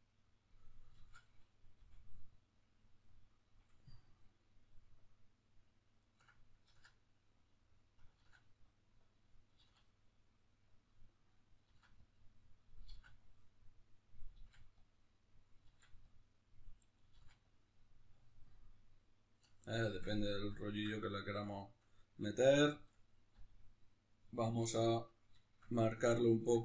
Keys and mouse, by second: 1.0 ctrl+z, 1.7 f, 4.1-7.3 ctrl+middle drag, 6.7 ctrl+z, 7.3-18.2 drag, 8.2 ctrl+z, 9.6 ctrl+z, 11.7 ctrl+z, 12.9 ctrl+z, 14.4 ctrl+z, 15.7 ctrl+z, 17.1 ctrl+z, 18.2-26.6 ctrl+middle drag.